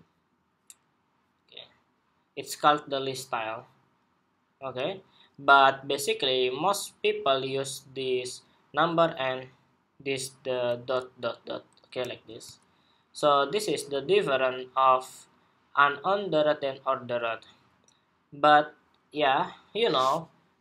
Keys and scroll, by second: 11.9 super+w.